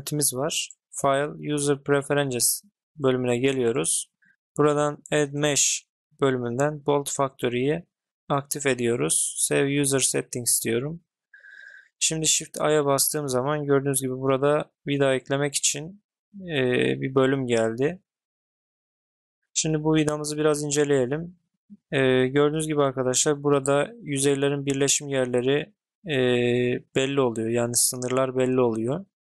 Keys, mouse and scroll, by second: 12.3 shift+a.